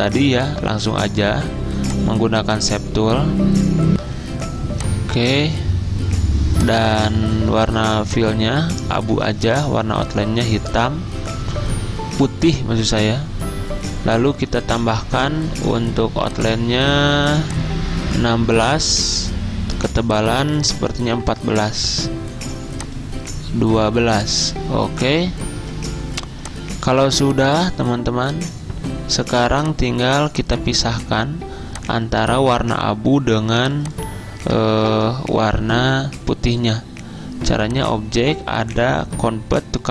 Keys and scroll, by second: 4.0 F10, 20.8-21.6 typing, 34.3-35.2 typing.